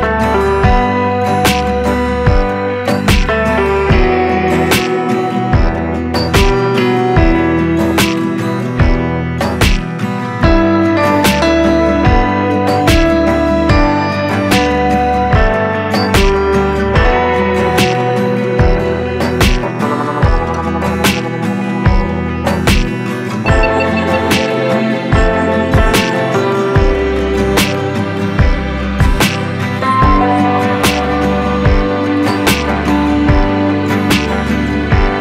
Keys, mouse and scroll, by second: 1.3-1.6 scroll up 1, 1.6 d, 1.8 s, 3.0 click, 3.6 click, 3.9 click, 4.3 g, 5.6-5.9 scroll down 3, 5.9 click, 6.1-6.5 scroll down 3, 6.5-8.1 shift+middle drag, 8.6-9.5 shift+middle drag, 9.5-10.9 scroll up 3, 9.9 shift+middle drag, 10.9 scroll down 1, 11.2 shift+right click, 11.3 shift+a, 12.1-12.5 scroll down 5, 12.5 scroll up 2, 12.7 g, 15.3 scroll down 4, 15.5 g, 16.8 click, 17.6 click, 18.1 click, 18.7-20.2 drag, 20.6 click, 21.0-22.4 drag, 22.8 click, 23.2-24.5 drag, 24.6 click, 24.9-26.1 drag, 26.2 scroll up 2, 26.4 s, 27.3 Tab, 27.4 e, 27.9 Tab, 28.4 drag, 29.2-31.8 drag, 31.8 scroll down 1, 31.9 Tab, 32.4 3, 32.5 click, 33.0 Tab, 33.6-34.1 right drag, 34.1 click, 34.5 click.